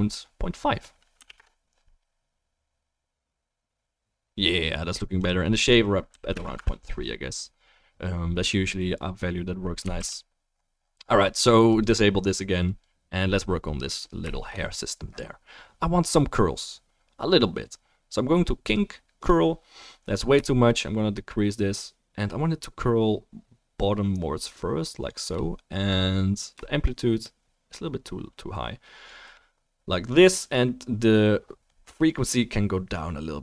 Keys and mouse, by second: 10.0 ctrl+s, 12.7 middle click, 12.8-18.7 drag, 18.7-20.3 middle drag, 20.9 shift+middle click, 30.6-33.4 middle drag.